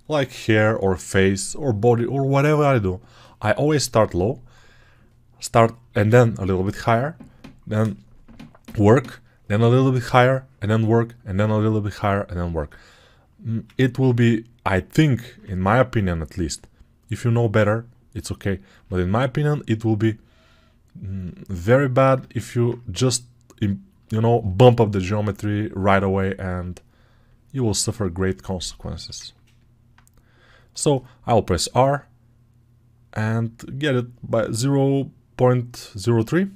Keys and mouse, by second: 9.7 alt+right click, 11.2-36.5 drag, 31.4 r.